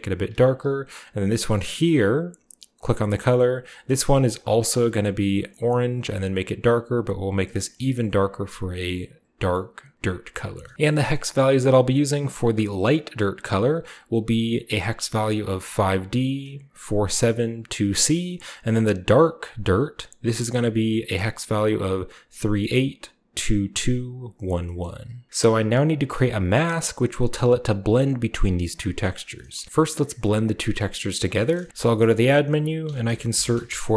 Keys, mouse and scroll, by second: 1.8 click, 2.7 click, 2.8 middle click, 4.3 click, 5.3 click, 6.1-6.8 scroll down 2, 6.9 click, 9.4-9.8 shift+scroll down 2, 9.9-10.6 middle drag, 10.7 ctrl+v, 10.8 ctrl+middle click, 11.1-12.8 ctrl+middle drag, 12.8-14.6 drag, 19.3 click, 20.2 click, 24.4 scroll down 2, 24.8 middle click, 25.3-26.6 middle drag, 27.7-31.5 ctrl+shift+drag, 29.1 scroll down 2, 29.3-30.7 middle drag, 30.4 g, 31.5-32.6 scroll up 2, 31.7 typing, 32.1 middle click, 32.8-33.6 typing.